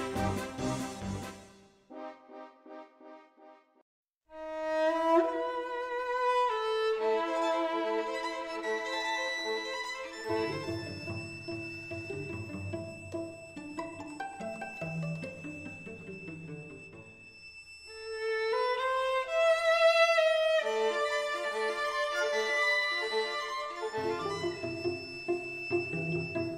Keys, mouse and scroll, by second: 1.2 middle click, 1.6-3.7 middle drag, 5.5-7.2 middle drag, 7.2-9.0 drag, 9.0 Tab, 9.7 z, 10.6-19.9 right drag, 11.0 Tab, 13.6-15.9 drag, 16.2 x, 19.9 x, 22.2 shift+a.